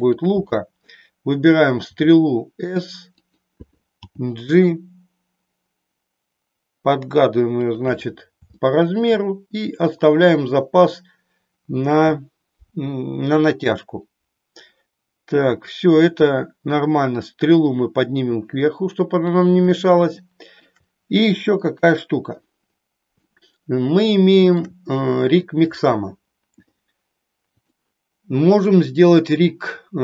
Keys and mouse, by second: 0.0 click, 1.7 s, 4.0 g, 7.7 click, 8.6 shift+middle click, 17.2-19.4 drag, 20.2 ctrl+middle click, 21.6 KP_3, 23.4-24.6 shift+middle drag, 25.4 click, 27.6 click.